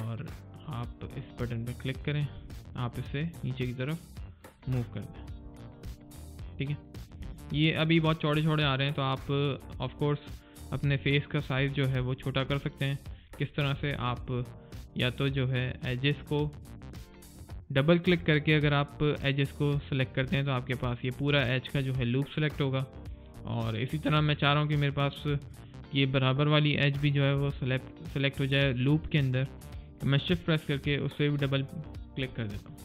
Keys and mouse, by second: 4.7 right click, 5.0 click, 5.4 middle click, 5.7 click, 8.7 alt+right click, 9.1 alt+click, 12.5 alt+click, 12.9 alt+right click, 13.2 click, 13.9 middle click, 14.2 alt+click, 14.8 right click, 16.7 click, 27.3 click, 31.0 click.